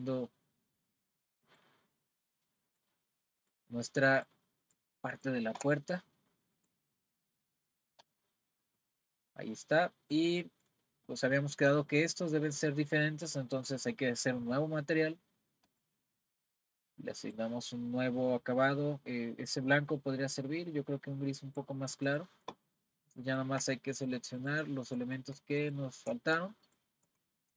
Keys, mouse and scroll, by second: 1.5 shift+click, 2.7 shift+click, 3.4 shift+click, 4.1 shift+click, 4.6 shift+click, 5.1 shift+click, 6.6 click, 8.0 click, 9.3-14.3 middle drag, 15.7-18.7 drag, 22.1 click, 23.2 click, 24.0 shift+click, 24.4 shift+click, 25.6 shift+click, 26.6 shift+click.